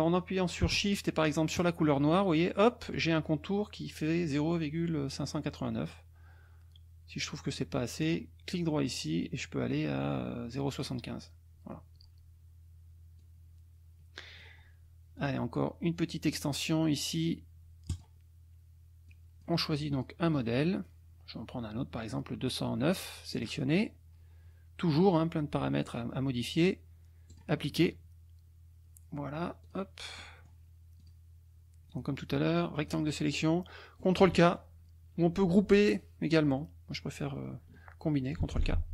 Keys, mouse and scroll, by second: 1.6 shift+click, 8.0 right click, 10.7 click, 13.2-14.6 drag, 15.2 click, 17.9 click, 19.1 click, 19.9 click, 20.3 click, 21.9 click, 23.3 click, 27.3 click, 29.6 click, 30.1 middle click, 30.4 click, 31.0 click, 31.9-33.1 drag, 38.4 ctrl+k.